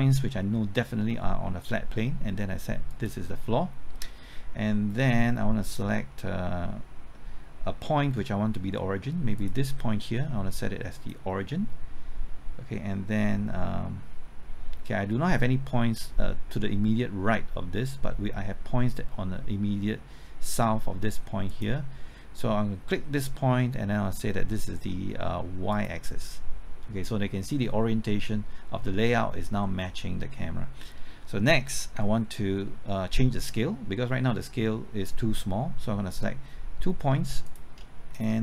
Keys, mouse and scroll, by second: 2.9-22.5 drag, 37.4 click, 38.1 shift+click.